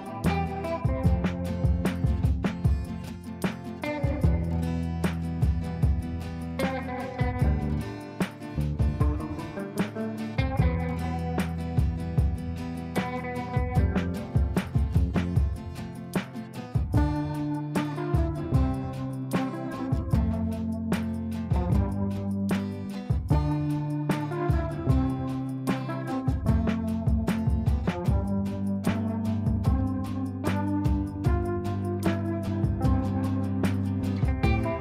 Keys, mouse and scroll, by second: 5.0 click, 5.0 click, 6.8 e, 7.9 ctrl+space, 9.9 click, 12.0 ctrl+a, 14.6-20.9 typing, 18.0 ctrl+space, 18.7 shift+click, 22.3 click, 23.0 F3, 23.9 F2, 24.2-34.4 drag.